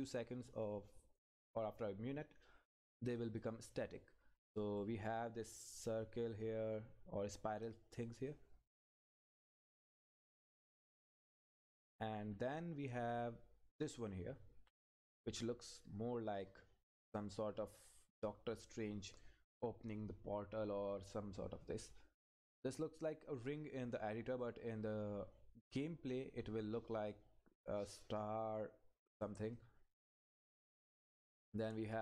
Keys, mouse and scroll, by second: 1.3-1.8 scroll down 1, 3.2 click, 9.6 Up, 25.1 scroll down 1, 29.5 click, 30.4 Up.